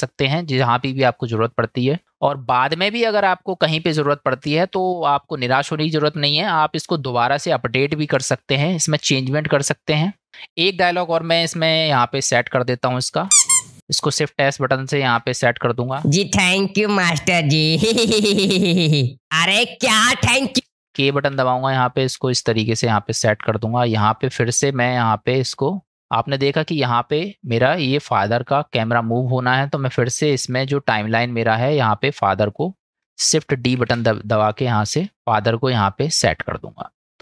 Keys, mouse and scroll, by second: 10.3 middle click, 11.0 middle click, 12.6-13.1 drag, 13.3 space, 13.7 click, 13.7 space, 15.1 shift+s, 15.9 space, 17.7 middle click, 20.6 space, 21.3 k, 21.9 click, 25.9-27.3 drag, 28.4 click, 30.5 middle click, 32.5 click, 33.8 shift+d.